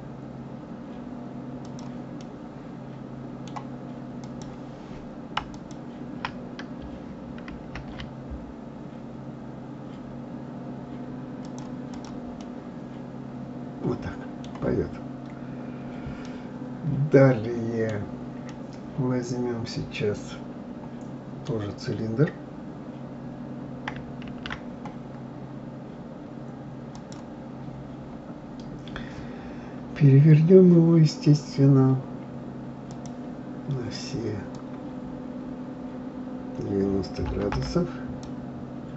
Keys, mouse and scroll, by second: 2.2-4.1 middle drag, 4.1 click, 5.5 alt+click, 7.5 ctrl+b, 11.9 click, 12.4-14.9 middle drag, 14.9-15.4 scroll down 1, 15.4-16.2 scroll up 6, 16.2-21.5 middle drag, 24.3 shift+a, 27.6-28.0 scroll down 1, 28.4-31.5 scroll down 9, 32.9-37.5 drag.